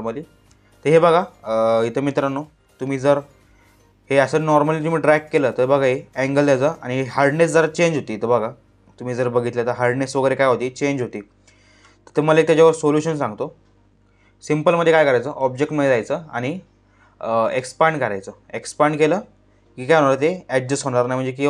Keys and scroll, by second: 12.5 ctrl+z.